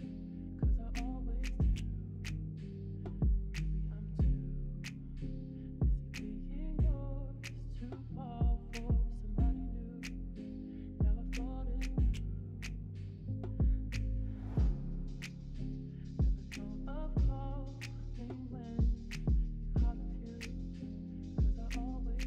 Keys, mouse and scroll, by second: 1.2 middle click, 2.7 shift+click, 3.3 shift+click, 6.2 shift+middle click, 8.6-9.4 w, 11.2 e, 14.7 s, 17.6 s, 18.1 middle click, 18.8 click, 19.7 click, 20.5 middle click, 22.1 middle click.